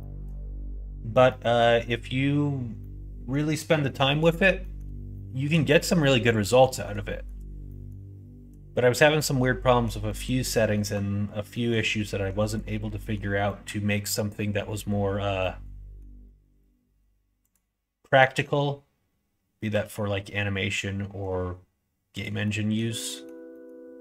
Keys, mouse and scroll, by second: 1.2 middle click, 2.8-4.1 middle drag, 4.5 middle click, 5.1 shift+middle click, 5.9 middle click, 6.5 middle click, 7.0 shift+middle click, 7.7 middle click, 8.9 middle click, 9.6 shift+middle click, 10.0 middle click, 10.7 middle click, 11.5 middle click, 12.5 click, 12.9 middle click, 13.4 middle click, 15.3 middle click, 17.4 click, 19.6 g, 22.4 scroll up 1, 22.4 middle click, 23.0 scroll up 1, 23.1 middle click, 23.2 scroll down 1, 23.5 scroll up 1, 23.5 middle click, 23.6 scroll down 1.